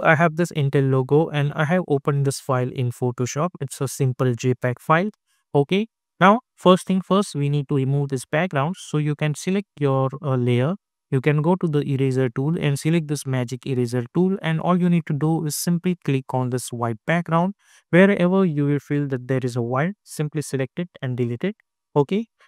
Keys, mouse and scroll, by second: 5.3 click, 9.6-13.2 drag, 16.3 click, 20.0 click.